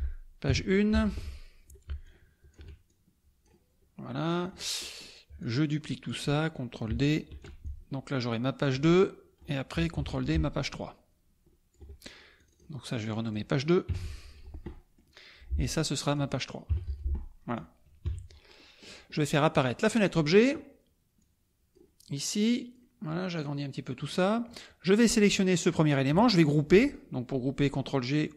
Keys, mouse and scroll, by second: 0.0-0.5 typing, 0.9 F1, 2.0-3.6 ctrl+shift+drag, 4.2-4.6 drag, 4.8-5.2 drag, 5.4-6.2 drag, 7.3 ctrl+d, 7.6-8.9 ctrl+drag, 9.4 click, 9.9 ctrl+d, 10.3-11.9 ctrl+drag, 12.3 click, 13.1 click, 13.9 KP_2, 14.7 middle click, 15.9 click, 16.7 KP_3, 16.8 F1, 17.4 click, 18.0 KP_Subtract, 18.5 click, 19.6 click, 20.0 click, 21.2 click, 22.5 click, 23.4 click, 25.0-25.9 drag.